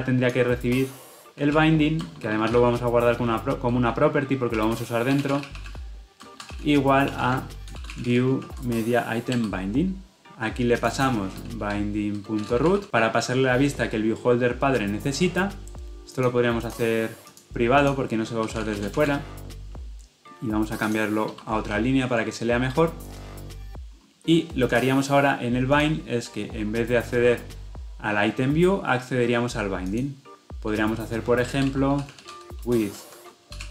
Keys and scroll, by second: 9.4 Return, 21.6 ctrl+alt+l.